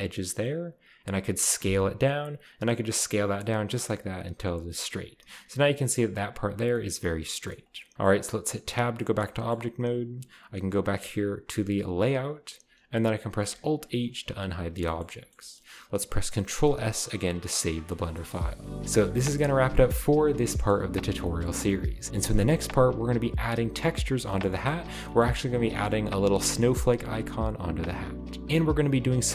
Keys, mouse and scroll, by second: 1.6 s, 4.4 click, 4.8 scroll up 1, 5.1 a, 5.3 a, 6.6 scroll down 1, 6.7 middle click, 7.7 scroll down 1, 8.4-8.9 shift+scroll up 1, 8.7 Tab, 12.2 click, 13.8 alt+h, 14.4-15.3 scroll down 1, 14.6 a, 14.9-15.8 shift+middle drag, 16.6 ctrl+s, 18.1-18.8 shift+scroll up 1, 20.7-21.2 middle drag, 21.4-22.0 shift+middle drag, 24.0 right click, 24.3-24.8 shift+middle drag, 24.3-26.1 scroll up 6.